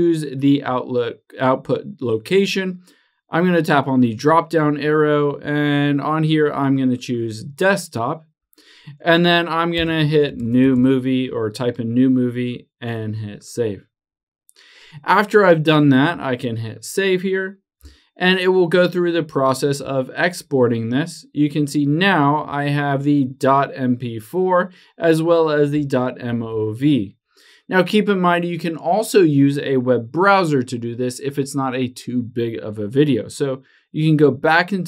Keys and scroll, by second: 19.4 super+h, 26.2 super+h.